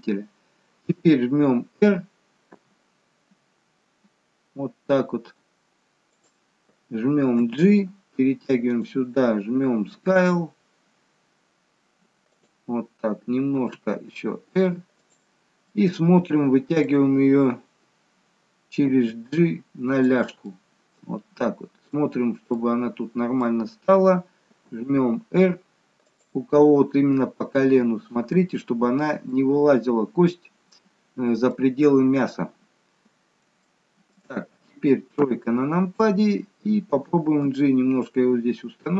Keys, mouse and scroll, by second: 2.4 r, 7.3 g, 9.8 s, 13.6 r, 15.7 middle click, 20.4 middle click, 22.5 middle click, 24.6 r, 27.4 middle click, 27.4 scroll up 1, 28.7-29.3 scroll down 1, 29.3 middle click, 31.9-32.4 scroll down 1, 32.6-33.4 scroll up 1, 33.6 shift+middle click, 35.7 KP_3, 37.4 g.